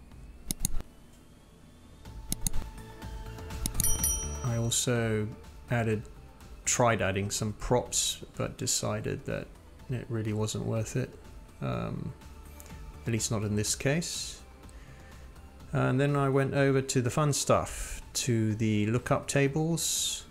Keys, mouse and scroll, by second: 0.0 click, 0.4 click, 0.9 click, 2.7 scroll down 1, 2.8 click, 3.4 click, 3.4 scroll down 1, 7.8 click, 8.0 ctrl+z, 8.8 click, 9.2 scroll down 1, 9.7-10.2 scroll up 1, 10.2 scroll up 1, 10.3 click, 11.1 click, 12.0 drag, 12.2-12.6 scroll down 2, 13.2 click, 14.6-15.3 scroll down 1, 15.3 click, 17.1-20.3 drag.